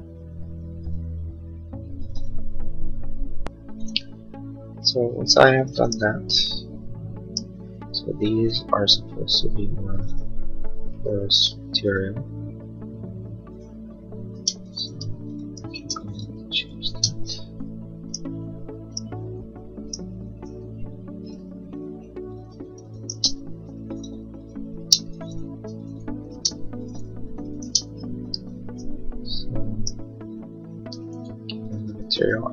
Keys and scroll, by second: 10.5 b, 14.3-17.1 typing, 17.2 Escape, 22.2 b, 22.7 space, 22.9 Escape, 24.0 b, 24.8 Escape, 25.0 b, 26.2 space, 26.5 Escape, 27.2 b, 27.6 space, 27.9 Escape, 32.2 b.